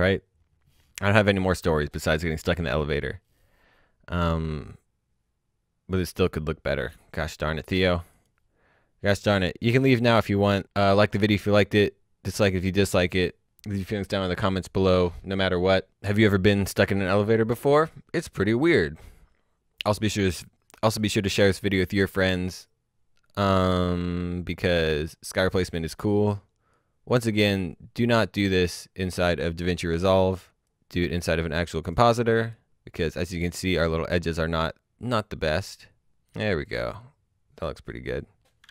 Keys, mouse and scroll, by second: 8.1 click, 9.9 click, 11.2 click, 18.5 click, 20.5 click, 25.9 click, 28.4 click, 31.1 alt+s, 31.9 click, 33.2 click, 33.4-34.0 scroll down 1, 34.0 click.